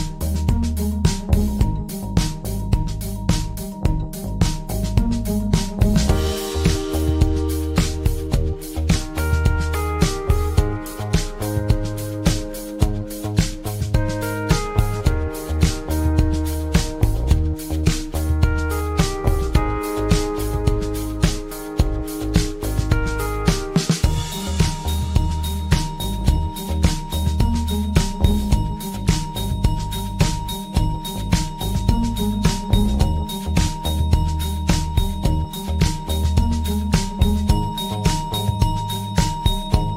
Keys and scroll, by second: 33.1 ctrl+z.